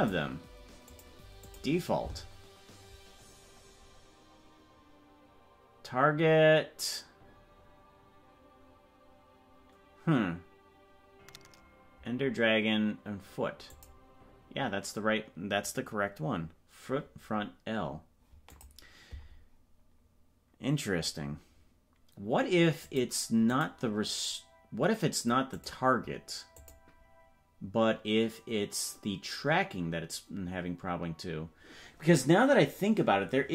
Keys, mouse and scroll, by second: 0.8-1.6 drag, 13.6-18.5 drag, 22.8 click, 25.6 click, 26.5-33.5 drag.